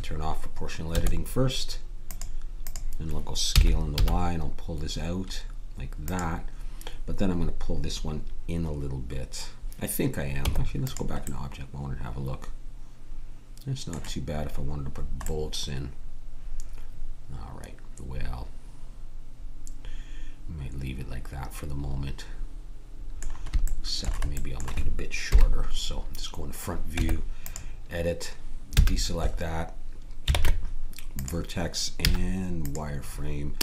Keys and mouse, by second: 2.1-3.9 drag, 3.5 s, 10.3 Tab, 14.9-17.2 middle drag, 23.6-25.3 middle drag, 25.3 KP_1, 26.9 Tab, 28.8 a, 30.3 ctrl+Tab, 32.0 z.